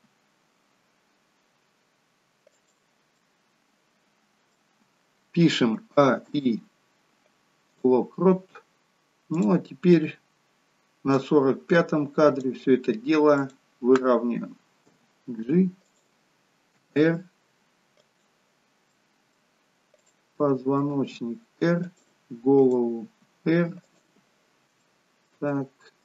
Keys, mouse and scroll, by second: 3.1 middle click, 5.8 a, 9.4 click, 11.2 click, 15.0 g, 16.8 r, 19.0 middle click, 19.9 click, 20.4 middle click, 20.9 r, 22.6 click, 23.1 r, 24.8 shift+middle click, 25.5 middle click.